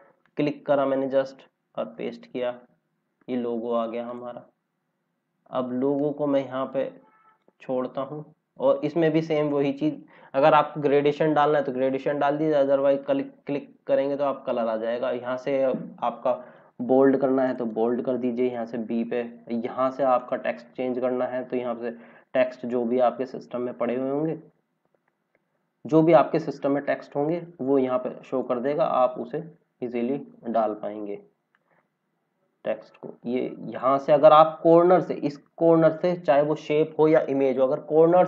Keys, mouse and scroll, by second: 1.9 ctrl+v, 4.3 click, 4.5 scroll up 1, 5.9 click, 8.0 scroll up 1, 12.9 click, 20.1 click, 28.2 click, 31.5 click, 35.3 scroll up 1, 38.0 click.